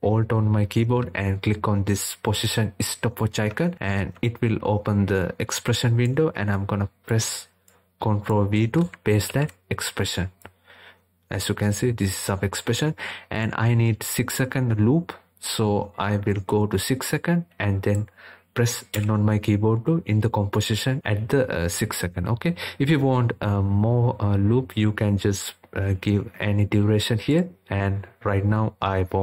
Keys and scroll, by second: 8.2 ctrl+v, 17.9 n.